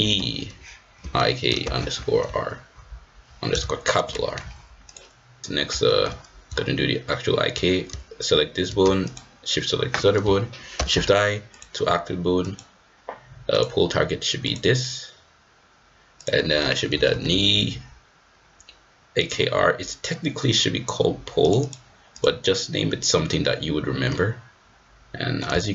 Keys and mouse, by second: 0.1 e, 5.4-6.0 shift+middle drag, 9.0 shift+click, 10.7 shift+i, 12.4 click, 16.2-19.3 drag, 17.3 e, 21.4 click, 22.1 click, 24.1-25.4 middle drag.